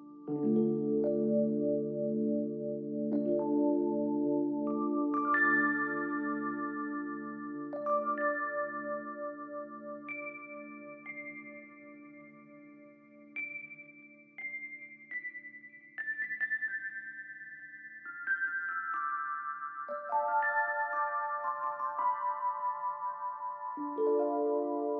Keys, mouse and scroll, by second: 1.3 shift+click, 3.0 space, 3.3 double click, 3.5 space, 6.2 double click, 14.1 right click, 15.1 double click, 16.4 Delete, 17.8 ctrl+g, 19.9 alt+scroll up 1, 21.1-21.9 alt+scroll up 1.